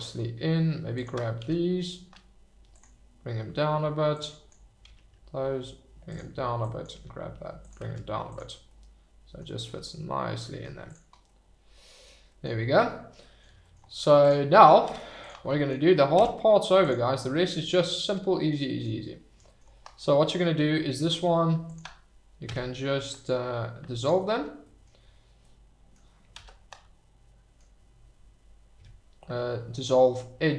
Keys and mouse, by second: 1.4 g, 2.7 click, 4.1 click, 4.8 g, 6.1 click, 6.6 click, 6.9 g, 7.6 click, 7.8 Tab, 8.6-9.4 middle drag, 9.7-10.6 middle drag, 10.8 click, 11.2-12.0 middle drag, 13.2 middle drag, 14.8 Tab, 16.1 Tab, 17.3 click, 18.6 click, 21.6 alt+click, 22.4 x, 24.6 click, 25.4-25.9 drag, 26.3 ctrl+z, 26.6-27.5 drag, 28.7 x.